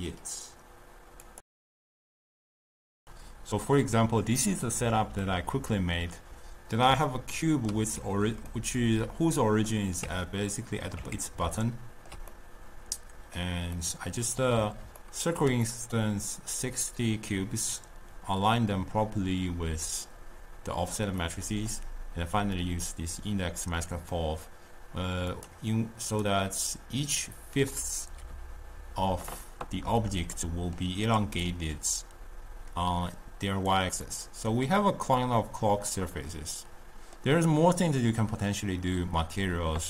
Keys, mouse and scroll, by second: 0.0 middle click, 5.3-10.1 middle drag, 10.1 Tab, 11.2 Tab, 11.7-18.9 ctrl+middle drag, 21.5-24.4 middle drag, 25.3 click, 26.2 drag, 30.4-31.5 middle drag, 31.5-34.1 drag, 34.1-38.3 middle drag.